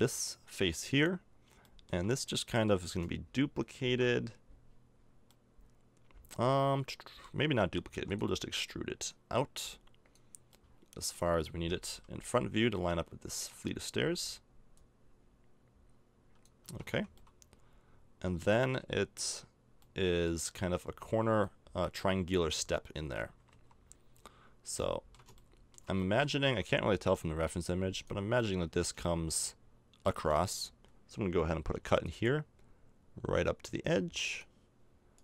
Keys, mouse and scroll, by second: 6.2 middle click, 7.9 e, 8.7-10.7 drag, 11.7 KP_1, 13.6 middle click, 14.8-16.4 drag, 16.6 a, 16.9 Tab, 22.4 middle click, 23.5 KP_5, 24.9 middle click, 26.4 Tab, 29.2 middle click, 29.5 middle click, 31.8 ctrl+r.